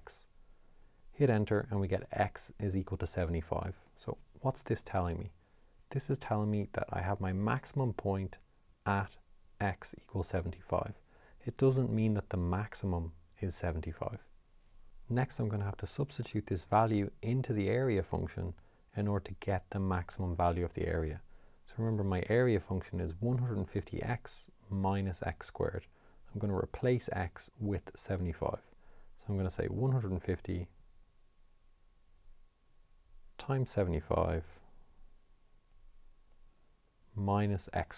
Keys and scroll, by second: 0.5 Return, 29.2 1, 30.0 5, 30.8 0, 34.5 7, 35.2 5, 36.4 -, 37.7 7.